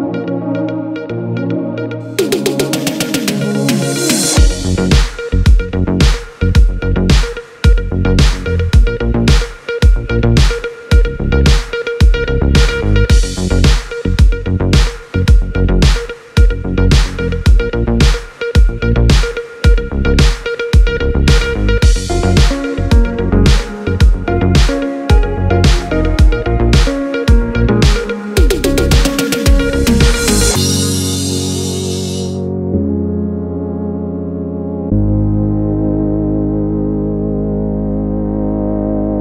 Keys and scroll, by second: 3.3 super+z, 8.3 a.